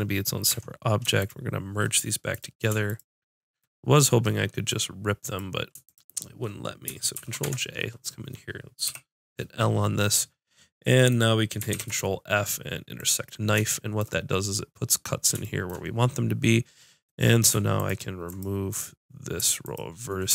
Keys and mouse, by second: 0.7 Tab, 7.2 ctrl+j, 7.4 Tab, 8.9 l, 11.7 ctrl+f, 17.1 middle click, 17.8-20.3 drag.